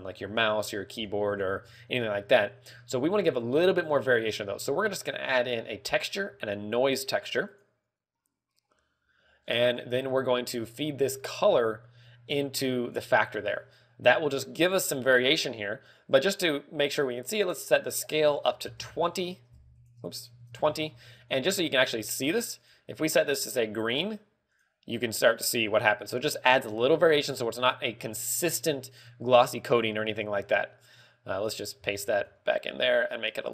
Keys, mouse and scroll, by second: 3.2 scroll up 1, 3.8 click, 3.8-4.9 scroll up 3, 5.2 shift+a, 9.9-10.4 scroll down 3, 10.4 g, 11.3 click, 15.9 middle click, 16.8 scroll up 1, 17.5 scroll up 2, 18.3 ctrl+click, 20.3 ctrl+click, 21.1 ctrl+click, 22.0 middle click, 23.1 click, 25.0 click, 32.3 ctrl+v, 32.6 click.